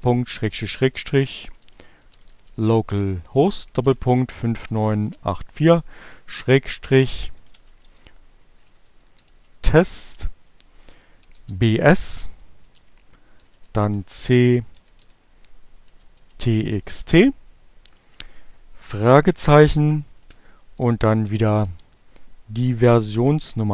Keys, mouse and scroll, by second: 0.0-5.0 typing, 6.1-10.3 typing, 11.8-15.2 typing, 19.3-20.7 typing, 22.4 shift+0.